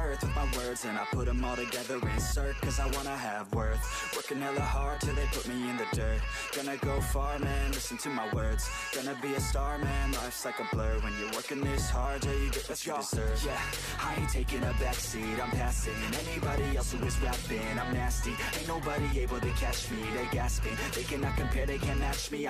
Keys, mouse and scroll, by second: 0.0-1.3 typing, 2.5 r, 2.8 shift+middle click, 3.1 e, 3.9 shift+middle click, 4.0 scroll up 1, 4.5 e, 5.2 g, 6.5-7.0 shift+middle drag, 7.0 e, 7.6 scroll down 4, 8.0 click, 8.2 middle click, 8.5 scroll up 1, 8.7 shift+middle click, 9.2 ctrl+l, 9.5 g, 11.3 middle click, 11.5 scroll down 2, 11.6 shift+middle click, 12.3 scroll up 3, 12.8 ctrl+r, 14.4 ctrl+r, 16.5 shift+middle click, 16.9 ctrl+r, 18.6 ctrl+r, 19.7 ctrl+r, 20.3-20.8 middle drag, 20.8 ctrl+r, 21.3 scroll down 4, 21.5-21.9 middle drag, 21.9 scroll down 1, 22.1 middle click, 22.3 scroll up 10.